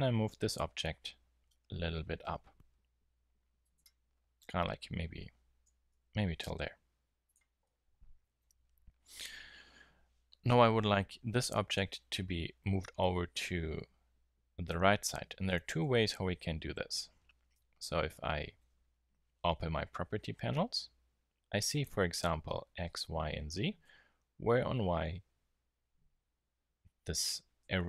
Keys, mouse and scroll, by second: 3.7-5.8 drag, 5.8 g, 7.3 drag, 7.6 drag, 15.9 n.